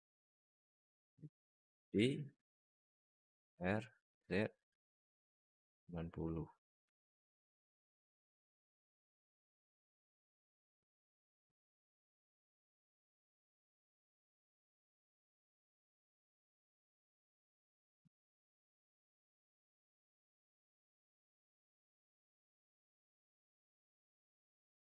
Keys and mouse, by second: 1.8 shift+d, 3.3 r, 6.9 alt+middle drag, 7.4 right click, 7.9 alt+middle drag, 8.6 click, 9.5 drag, 9.9 alt+middle drag, 10.5 click, 11.6 r, 14.5-15.2 alt+middle drag, 15.7 alt+middle drag, 17.3 alt+shift+middle drag, 17.5 alt+middle drag, 21.2 alt+middle drag, 22.8 alt+shift+middle drag, 23.2 alt+middle click.